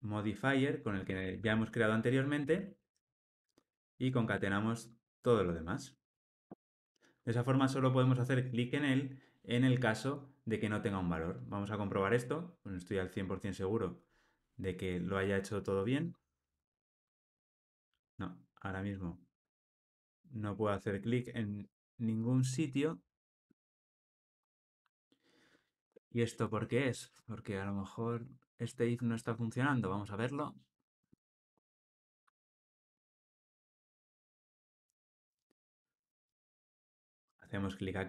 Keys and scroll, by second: 3.5 Escape, 6.0 alt+super+l, 6.6 ctrl+alt+o, 11.6 ctrl+r, 29.4 super+F8, 31.1 ctrl+d.